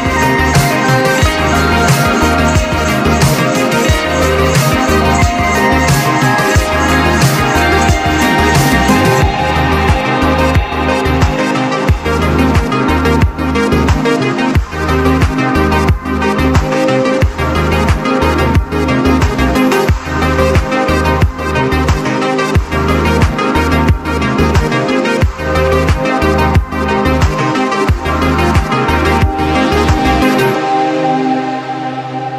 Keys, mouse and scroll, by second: 0.4-2.1 drag, 3.5 click, 4.4 right click, 4.9-7.1 drag, 9.5 click, 10.6 click, 10.6 click, 14.6-15.6 typing, 15.6 click, 17.7-21.1 drag, 17.7-18.4 typing, 22.1 click, 23.3-27.6 drag, 27.6-29.6 drag, 29.6-32.0 shift+drag.